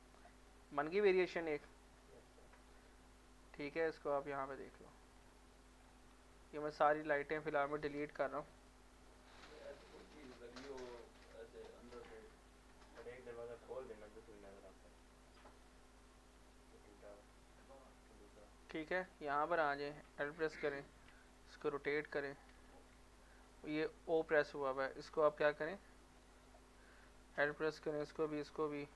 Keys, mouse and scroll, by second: 0.5 middle click, 0.9 Tab, 1.8 middle click, 2.7-4.0 typing, 4.1 middle click, 4.3 scroll down 1, 4.8 middle click, 5.1 scroll up 1, 5.6 middle click, 5.8 scroll down 1, 7.0 click, 8.0 Delete, 8.6 click, 8.9 Delete, 9.9 click, 10.1 click, 10.4 Delete, 11.1 click, 11.5 Delete, 11.9 middle click, 12.2 scroll up 1, 12.5 middle click, 12.9 Tab, 14.5 z, 15.0 z, 15.1 z, 15.4 middle click, 15.6 scroll up 1, 16.1 middle click, 16.4 shift+middle click, 16.5 shift+middle click, 17.2 scroll up 1, 17.5 middle click, 18.3 click, 18.6 middle click, 19.0 Tab, 20.6-22.1 typing, 22.6 Escape, 24.2 click, 27.5 l, 28.3 l.